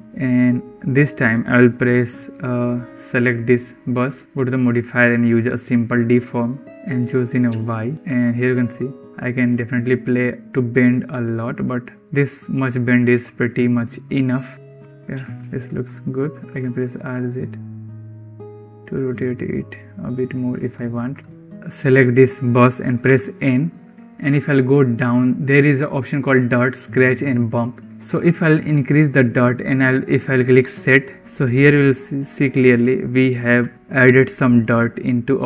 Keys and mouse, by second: 0.1 ctrl+s, 3.1 click, 4.3-6.6 drag, 7.1 click, 9.0-12.0 drag, 14.5 g, 15.5 ctrl+s, 16.2 r, 20.8 ctrl+s, 21.7 click, 22.9 n, 28.5 click, 30.8 click, 32.7 shift+middle drag, 32.8 shift+click, 32.9-33.3 shift+middle drag.